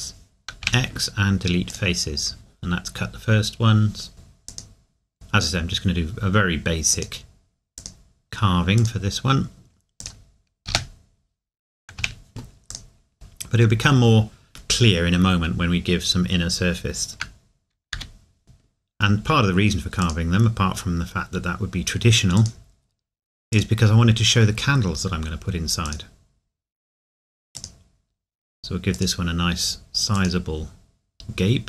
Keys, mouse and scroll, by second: 0.6 x, 4.1 k, 6.9 click, 13.1 middle click, 17.9 k.